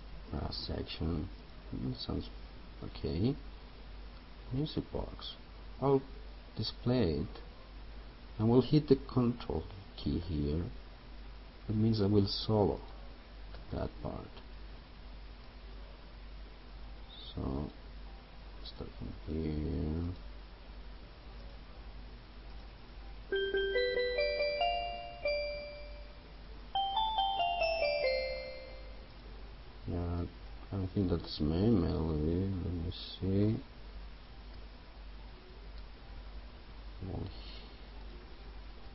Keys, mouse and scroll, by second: 12.9 ctrl+click, 15.6-31.6 drag, 34.2 Up, 35.9 Down, 37.6 click.